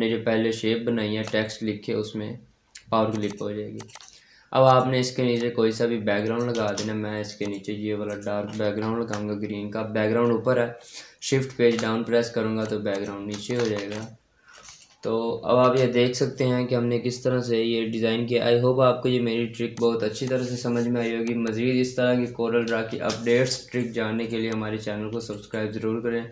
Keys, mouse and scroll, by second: 2.0 scroll up 1, 2.6-3.0 scroll down 1, 3.0 click, 6.5 space, 7.3 click, 8.0 right click, 11.4 shift+Page_Down, 12.4 click, 13.3 shift+click, 13.3-14.1 typing, 13.8 click, 18.8 space, 19.6 click, 24.3 click.